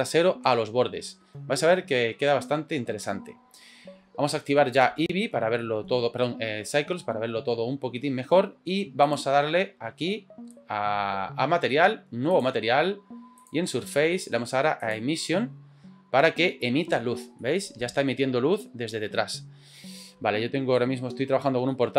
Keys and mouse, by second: 4.8 click, 5.6 middle click, 9.0 click, 12.3 click, 13.4-14.9 drag, 17.4-17.9 middle drag, 20.7 shift+middle click, 21.7 middle click.